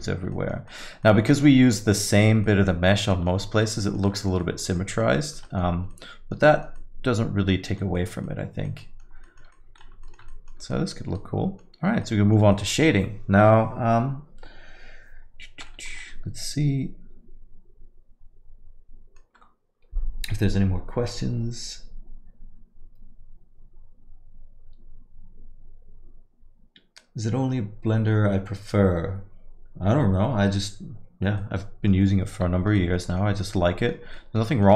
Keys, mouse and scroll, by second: 0.1 scroll down 1, 0.3 alt+middle click, 0.7 middle click, 1.1 alt+middle click, 1.3 middle click, 1.5 scroll down 2, 1.7 alt+middle click, 2.2-2.5 scroll up 2, 2.5 alt+middle click, 3.1 alt+middle click, 3.5 scroll up 1, 4.4 alt+middle click, 4.8 middle click, 5.2 alt+middle click, 5.5 middle click, 5.7 scroll down 1, 5.9 alt+middle click, 6.5 middle click, 6.8 alt+middle click, 8.0 middle click, 8.3 alt+middle click, 8.9 middle click, 9.3 alt+middle click, 9.5 middle click, 10.1 ctrl+middle click, 10.3 alt+middle click, 10.7 middle click, 11.2 middle click, 11.2 ctrl+middle click, 11.9 scroll down 1, 12.0 middle click, 12.5 middle click, 15.7 middle click, 16.0 alt+middle click, 31.4 middle click, 32.8 alt+middle click, 33.1 middle click, 33.4 middle click, 34.2 alt+middle click, 34.5 middle click.